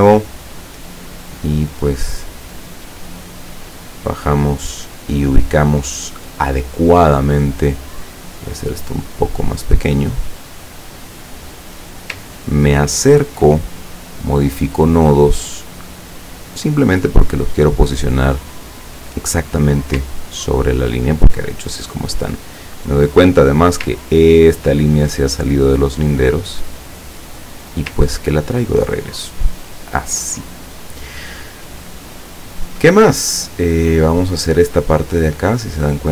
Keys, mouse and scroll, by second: 0.4-2.7 drag, 3.0 click, 3.9-5.5 drag, 7.4 click, 8.3-9.8 drag, 10.3-12.1 drag, 12.5-13.0 ctrl+scroll up 2, 14.4 click, 15.5-17.5 drag, 18.2-19.9 drag, 20.3 ctrl+scroll down 2, 23.1 click, 24.1-24.9 ctrl+scroll up 2, 25.9-27.9 drag, 28.1-29.6 ctrl+scroll down 6, 31.1-32.4 middle drag, 34.0 click.